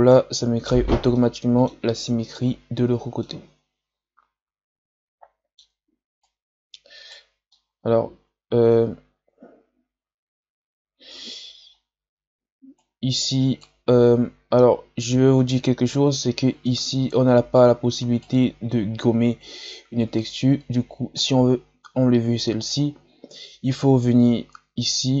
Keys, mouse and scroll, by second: 6.1-7.4 right drag, 7.4-11.2 middle drag, 12.7-13.9 right drag, 13.9-15.3 scroll up 1, 15.3-17.0 scroll down 1, 17.0-17.5 scroll down 1, 17.5-21.2 right drag, 21.2-22.4 scroll up 1, 22.4-23.1 scroll up 1, 23.1-25.2 scroll up 1.